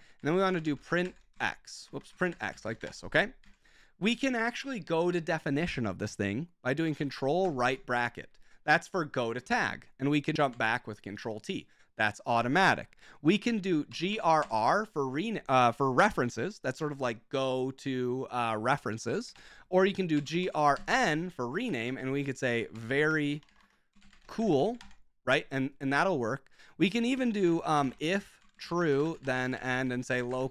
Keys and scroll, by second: 0.0-3.4 typing, 3.4 Return, 7.4 ctrl+], 10.5 ctrl+t, 13.7-14.9 typing, 19.0-21.3 typing, 21.9 ctrl+w, 22.3-25.1 typing, 26.8-30.5 typing.